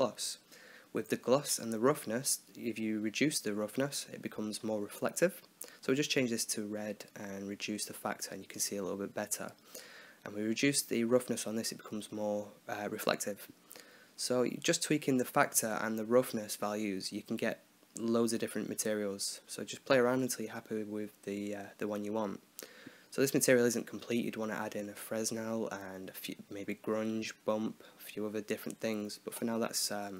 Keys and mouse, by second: 1.4 click, 4.8-5.9 drag, 6.9-8.0 drag, 9.9-10.9 drag, 13.0-14.0 drag, 16.7-17.8 drag, 19.7-23.8 middle drag, 24.3 click, 26.5-27.9 drag, 27.9 right click, 28.5-29.5 drag.